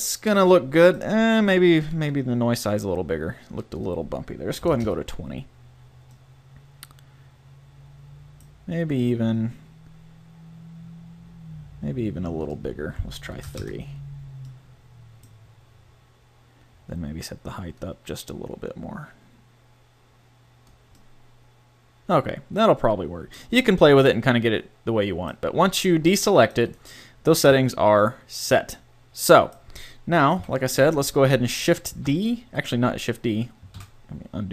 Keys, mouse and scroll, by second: 5.7 middle click, 9.2 middle click, 11.3-12.5 middle drag, 12.5-14.2 drag, 14.2 middle click, 16.7 middle click, 17.8-19.7 drag, 21.0-22.9 middle drag, 23.9 a, 24.1 click, 30.3 KP_7, 31.9 shift+d, 32.7 click, 33.7 ctrl+z.